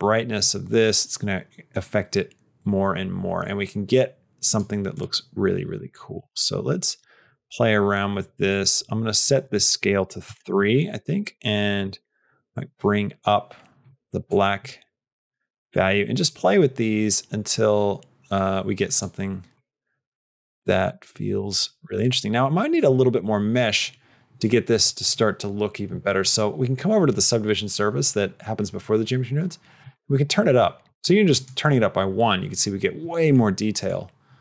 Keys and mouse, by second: 4.8 click, 5.7-10.8 drag, 11.8-13.7 drag, 14.3-15.7 drag, 16.3-18.9 drag, 19.7-21.3 drag, 21.8 click, 31.2 click, 33.7-34.4 drag.